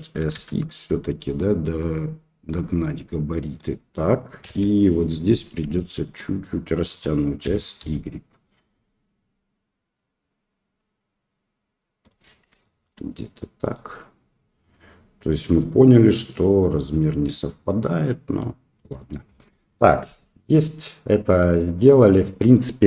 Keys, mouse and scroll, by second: 4.4 KP_3, 4.4 KP_Decimal, 5.7 shift+click, 7.4 s, 12.6 shift+click, 13.6 click, 15.4 g, 19.6-19.9 middle drag, 20.7-21.5 middle drag, 21.8 right click.